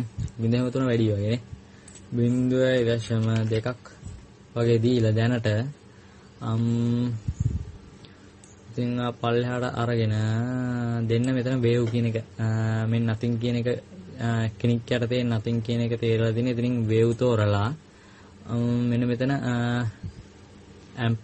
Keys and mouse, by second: 0.0-1.0 middle drag, 3.2-4.4 drag, 6.0-8.2 middle drag, 17.9-20.1 drag.